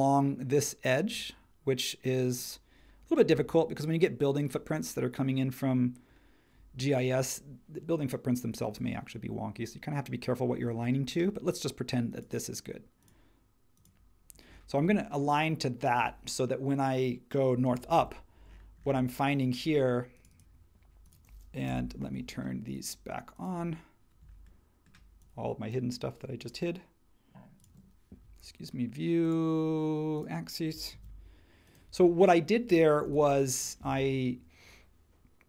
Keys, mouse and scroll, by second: 17.9 super+1, 21.7 n, 30.9 super+1, 33.0 h.